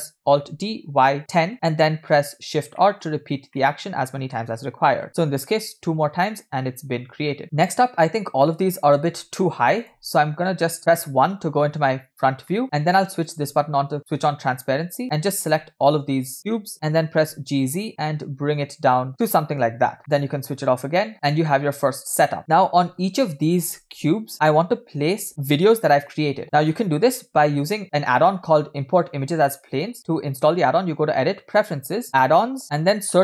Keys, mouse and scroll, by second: 2.3 scroll down 1, 2.8 middle click, 3.5-4.6 middle drag, 7.3-9.8 middle drag, 7.4 scroll up 4, 9.8-10.4 shift+drag, 10.8 KP_1, 11.4-11.7 scroll up 3, 12.6 shift+middle click, 20.0-21.1 drag, 20.0 middle click, 21.1 scroll down 3, 21.1 a, 21.5-22.4 middle drag, 29.5-32.1 drag.